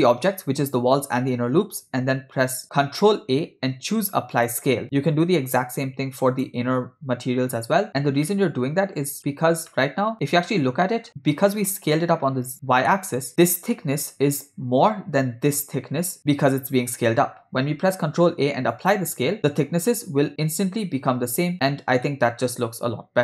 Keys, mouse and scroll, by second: 3.2 ctrl+a, 6.3 click, 8.3-9.4 ctrl+middle drag, 9.7-10.1 shift+middle drag, 10.5-11.4 ctrl+middle drag, 12.9-13.3 shift+middle drag, 18.1 ctrl+a, 22.1-23.2 shift+middle drag.